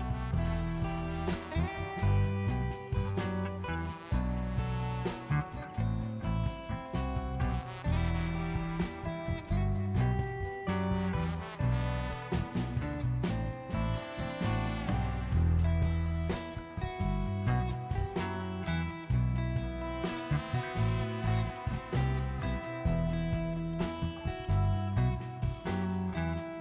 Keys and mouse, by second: 1.0 Tab, 2.3 Tab, 3.5 click, 4.0 click, 9.1-11.2 typing, 9.3 click, 9.8 click, 11.1 click, 11.4 click, 12.9-13.5 drag, 14.2-16.2 drag, 16.2 e, 18.5 e, 19.2 click, 19.8 ctrl+z, 21.9 e, 22.3 g, 23.5 g, 24.1 click, 24.5 Tab, 24.8 click, 25.7 Tab, 26.0 alt+click.